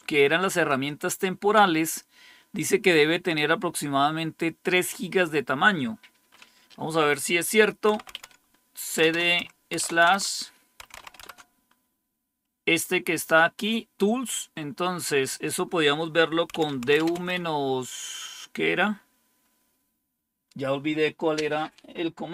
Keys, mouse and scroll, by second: 5.0-7.8 drag, 7.6-11.4 typing, 14.3-16.4 drag, 16.1-17.6 typing.